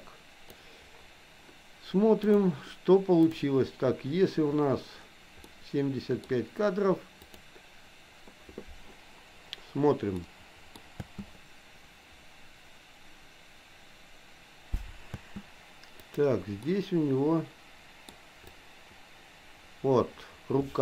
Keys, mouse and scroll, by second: 3.2 click, 5.5 middle click, 7.4 click, 10.2 middle click, 11.0 space, 15.1 space, 16.1 click, 16.6-18.0 middle drag, 18.6-20.8 drag.